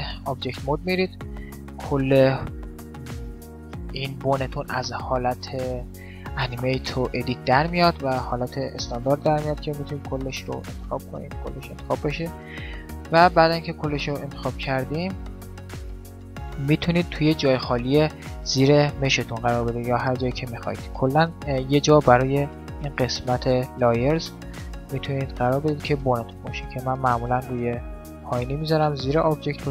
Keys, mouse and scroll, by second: 1.7-3.5 middle drag, 2.7 g, 10.1 g, 11.3 right click, 14.2-17.0 right drag, 17.0 right click, 27.4 m.